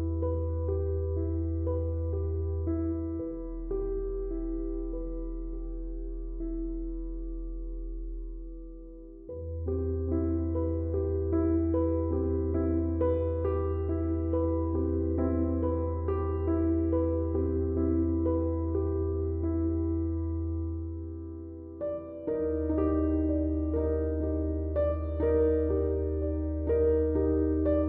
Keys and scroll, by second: 3.3 g, 3.5 y, 8.2 Tab.